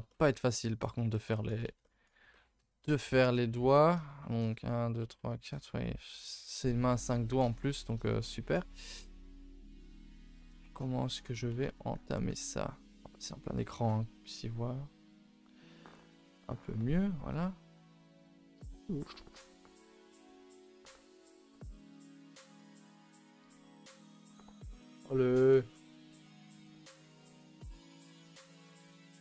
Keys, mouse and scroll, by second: 0.9-2.7 scroll up 1, 2.7-3.9 scroll up 1, 3.9-4.5 scroll up 1, 4.5-14.4 scroll up 1, 14.4-14.7 scroll up 2.